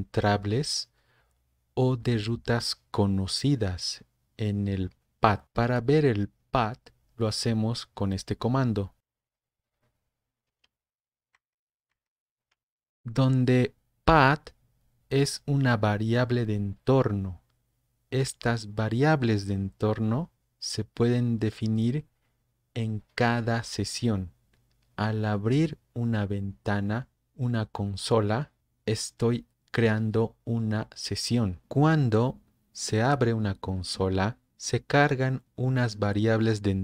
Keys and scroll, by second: 9.0 typing, 10.5 Return, 11.4 super+Up, 12.0 super+Up.